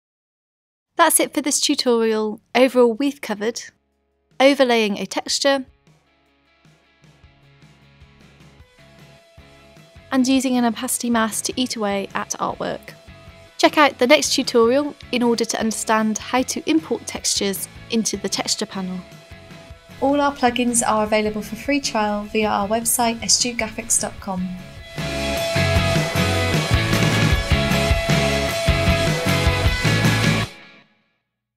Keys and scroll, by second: 13.8 z.